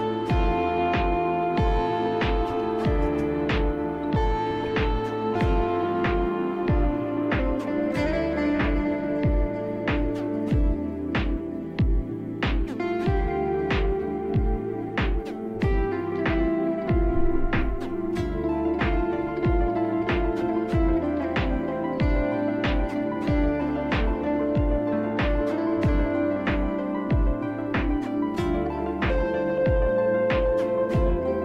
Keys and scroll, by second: 0.0 ctrl+c, 2.2-5.1 typing, 5.4 Return.